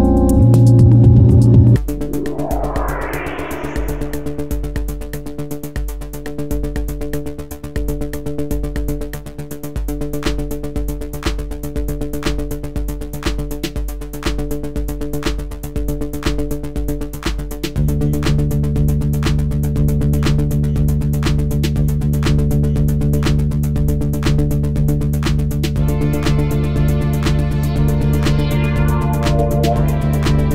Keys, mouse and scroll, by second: 2.8-5.7 middle drag, 6.1 middle click, 6.4-11.0 middle drag, 15.7-18.2 middle drag, 18.2 b, 21.8 middle click, 22.4 middle click.